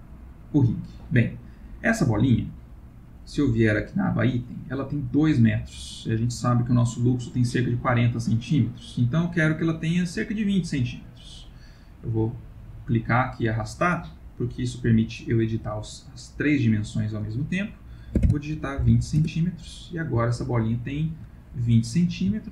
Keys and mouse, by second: 0.8 middle click, 3.0 click, 11.9 click, 20.3 ctrl+middle click, 21.3 middle click, 21.6 middle click, 22.3 middle click, 22.3 ctrl+middle click.